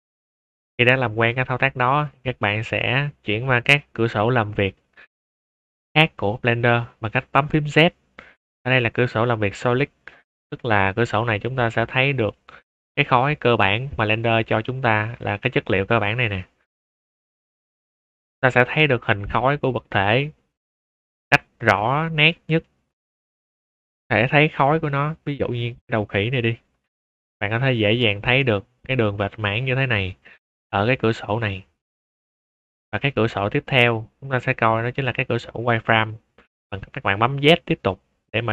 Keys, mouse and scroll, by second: 0.6 middle click, 1.0 shift+middle drag, 1.7-2.0 middle drag, 2.3 shift+middle drag, 2.8 scroll up 2, 3.1-3.5 middle drag, 3.9 shift+middle drag, 4.7-5.1 middle drag, 5.3 shift+middle drag, 7.6 z, 8.9 click, 10.2 shift+middle drag, 10.6 middle click, 10.9-11.4 middle drag, 12.3 click, 16.1 click, 17.3 click, 17.7-18.6 middle drag, 19.2 click, 20.0 click, 21.2 click, 21.7 shift+middle drag, 22.2-22.6 middle drag, 23.0 click, 23.3-24.0 middle drag, 24.6 x, 24.8 click, 25.3 shift+a, 26.5 click, 26.9 shift+middle click, 27.2 scroll down 2, 27.2 scroll up 2, 27.5-28.8 middle drag, 30.0 scroll down 2, 30.3 middle drag, 31.0 z, 32.6-33.1 middle drag, 33.1 z, 35.9 click.